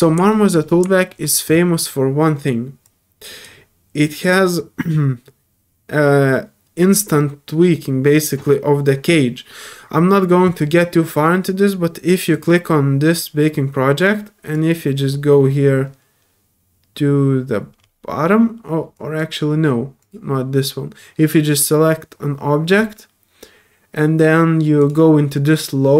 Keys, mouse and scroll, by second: 0.3 middle click, 2.8 click, 12.3 click, 14.5-14.9 drag, 17.8 middle click, 18.9 click, 20.0 click, 24.8 click.